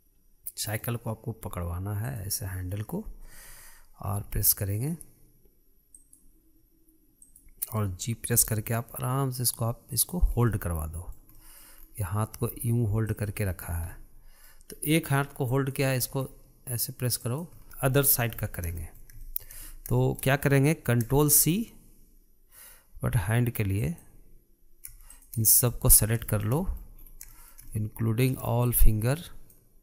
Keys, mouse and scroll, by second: 2.7 click, 4.8 g, 7.9 click, 9.0 g, 10.9 scroll down 2, 11.1-12.4 middle drag, 12.4-13.0 scroll up 3, 13.0 g, 14.1-14.5 scroll down 5, 14.5-15.3 middle drag, 15.3-15.7 scroll up 1, 15.7 middle click, 16.1-16.7 drag, 16.7 g, 17.6-20.4 shift+middle drag, 20.4-20.7 scroll down 1, 20.7-24.5 shift+middle drag, 24.5 click, 25.8 shift+click, 26.2 middle click, 26.6-27.0 scroll up 3, 27.0-27.7 shift+middle drag, 27.7-28.0 scroll up 2, 28.0-29.4 shift+middle drag, 29.4 shift+click.